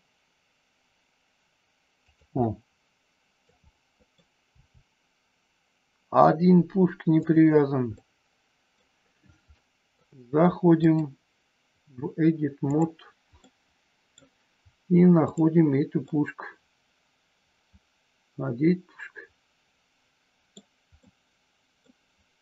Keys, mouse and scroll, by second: 2.0 click, 2.4-3.4 middle drag, 3.6 middle click, 4.5 r, 7.3 click, 7.9 middle click, 9.6 middle click, 10.9-12.8 drag, 13.4 middle click, 15.2 click, 16.0-20.5 middle drag, 20.9 middle click.